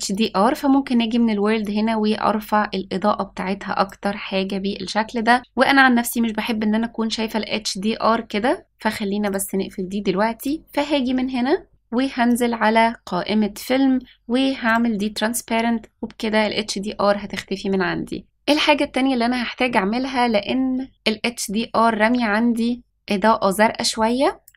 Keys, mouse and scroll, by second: 0.1 click, 1.6-3.8 drag, 10.3 click, 11.0-12.2 scroll down 2, 12.2 click, 13.6-14.6 scroll down 1, 14.6 click, 18.2 click.